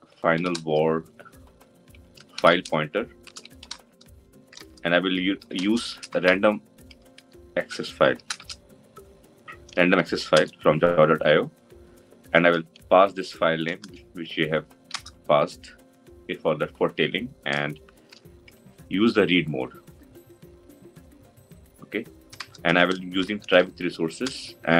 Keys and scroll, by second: 10.3 Return.